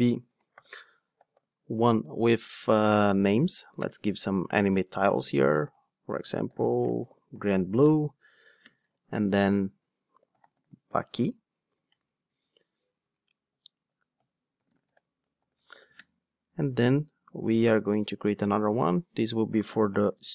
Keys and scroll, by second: 2.0 Return, 12.1 alt+Return, 16.6 super+d.